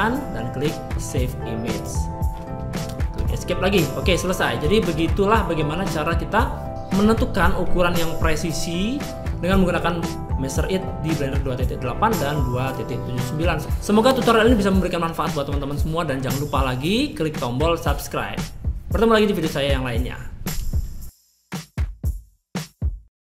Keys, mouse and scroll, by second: 3.1 Escape, 3.1-8.9 drag, 8.9 middle click.